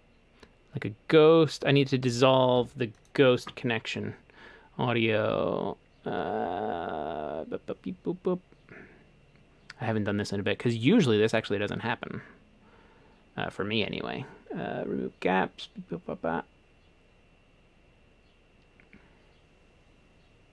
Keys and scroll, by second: 2.6 Escape.